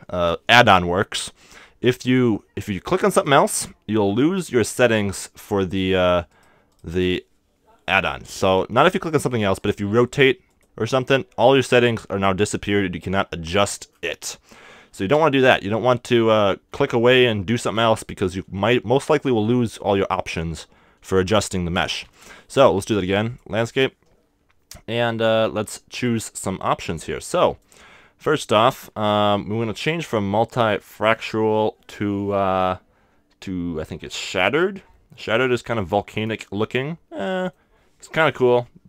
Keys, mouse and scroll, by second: 1.5-3.5 drag, 3.2-8.8 right drag, 9.1-11.4 right drag, 10.0 r, 10.6-12.5 drag, 13.2-15.9 middle drag, 14.9 x, 22.0 shift+a, 25.2-29.0 drag, 28.2-30.6 middle drag, 30.6-32.4 drag, 36.7-38.8 middle drag.